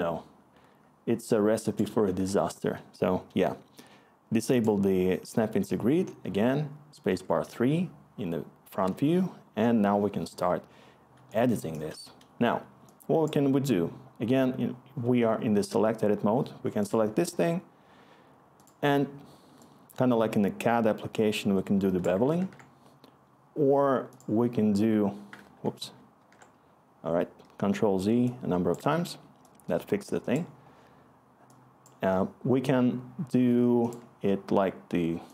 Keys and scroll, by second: 2.1 ctrl+z, 7.1 3, 11.6-12.0 scroll, 22.4 ctrl+z, 25.4 ctrl+z, 25.8 ctrl+z, 26.2 ctrl+z.